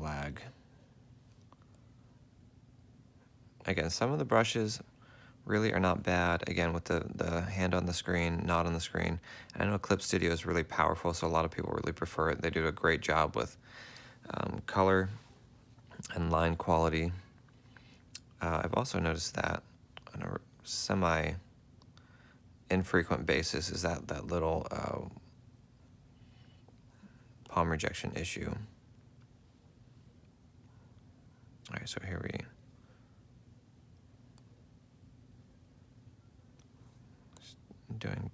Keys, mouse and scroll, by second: 1.2 F4, 11.6 ctrl+z, 12.0 ctrl+z, 33.3 ctrl+z, 33.9 ctrl+z, 34.1 ctrl+z.